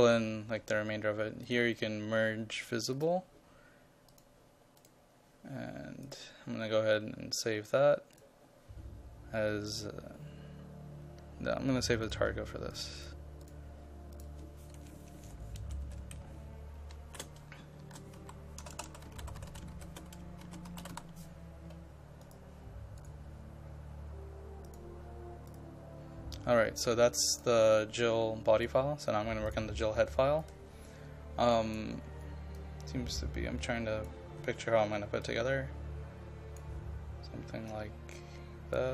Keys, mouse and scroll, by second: 15.6 Left, 15.9 Right, 16.2 shift+Left, 16.7-21.5 typing, 22.3 click, 23.4-38.9 drag.